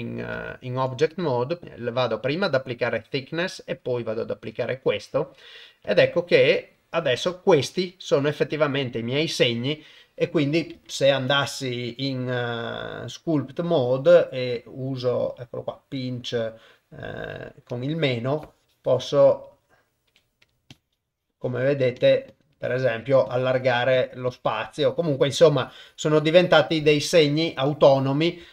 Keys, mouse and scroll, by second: 0.5 ctrl+Tab, 1.6 ctrl+z, 2.1-2.9 drag, 3.9-4.9 drag, 5.8 click, 7.2 Tab, 8.1 click, 8.7 click, 10.9 ctrl+Tab, 16.0 click, 18.3 click, 20.1 f, 20.7-21.7 drag, 22.0 click, 22.3 click, 22.7 click, 23.3 click, 24.0 click, 24.3-25.3 drag, 25.5-26.5 drag.